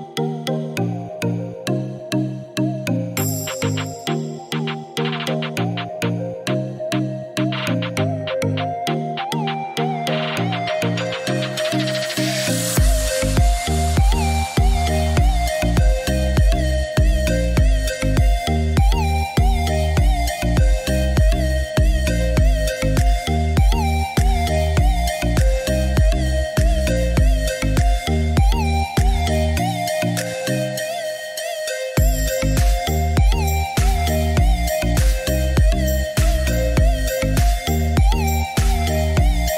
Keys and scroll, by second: 8.5 1, 9.3 6, 9.6 Return, 15.4 Escape, 38.5 Delete.